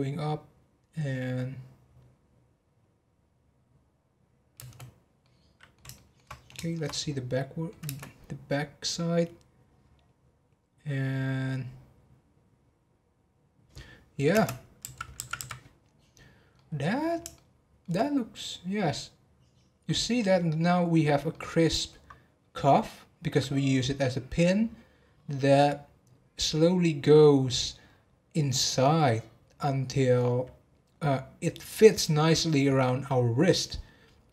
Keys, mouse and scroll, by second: 4.9 space, 5.2-6.3 middle drag, 6.3 scroll up 2, 6.5-7.8 shift+middle drag, 7.8 space, 15.4 Left, 16.5-18.7 middle drag, 18.7-20.7 scroll up 1, 21.3-24.4 middle drag.